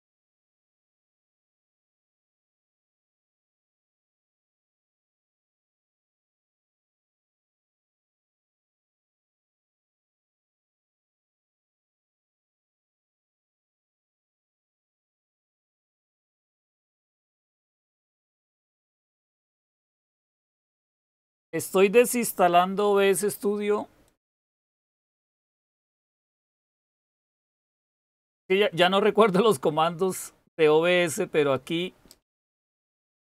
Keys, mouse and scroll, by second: 32.8-33.2 typing.